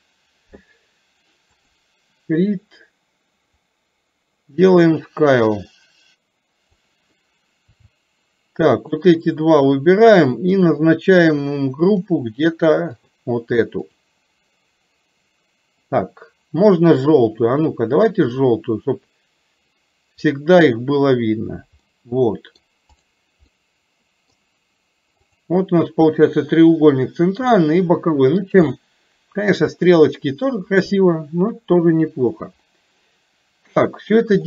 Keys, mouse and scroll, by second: 1.6 click, 3.6-6.8 drag, 9.0 shift+click, 12.0-13.3 drag, 18.3-20.5 drag, 21.9-22.6 middle drag, 23.0 click, 23.6-24.4 middle drag, 25.4 click, 27.5-28.5 middle drag, 28.6-29.6 shift+middle drag, 29.9-30.5 middle drag, 32.8-34.1 middle drag.